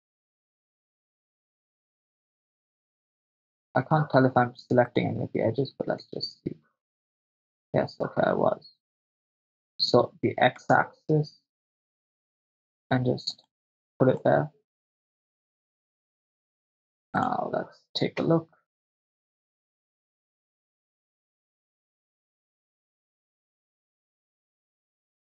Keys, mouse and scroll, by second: 0.5 right click, 0.8 right click, 1.9 ctrl+middle click, 3.1 right click, 4.9 shift+right click, 6.2 e, 10.7 x, 13.3 click, 14.3-15.7 middle drag, 17.4 click, 18.4 KP_0, 19.2-23.8 drag, 24.6 click.